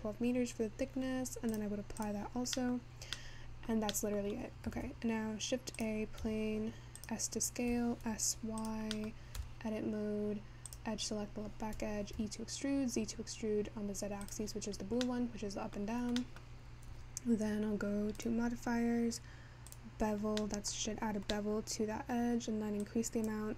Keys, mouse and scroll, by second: 1.5-4.4 drag, 4.4 middle click, 5.0 shift+a, 8.4 s, 9.0-12.6 middle drag, 12.6 e, 20.2-23.5 drag.